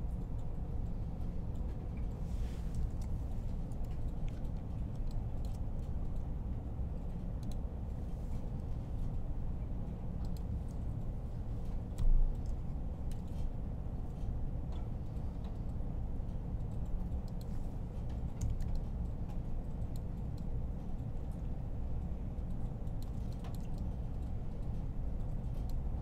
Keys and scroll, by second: 3.5 1, 8.4 r, 11.6-13.0 typing, 18.2 z.